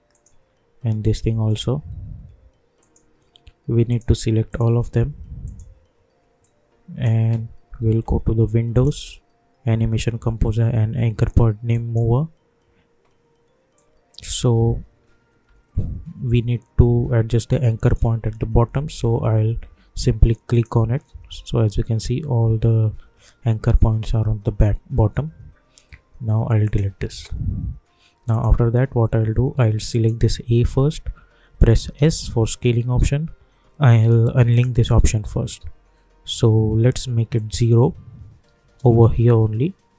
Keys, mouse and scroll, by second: 4.5-8.7 shift+drag, 11.7 click, 14.9-15.5 alt+scroll up 1, 20.5 click, 26.6 click, 32.0 s, 34.5 click, 37.3 click, 39.1 Return.